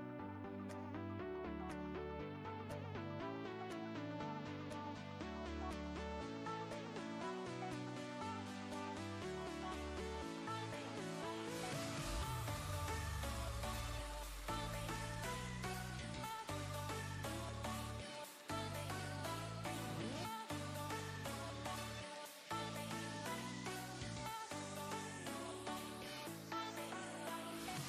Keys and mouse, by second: 3.9 click, 6.1 click, 15.6 click, 17.3-18.7 typing, 20.8 click, 23.3 right click, 27.2 click.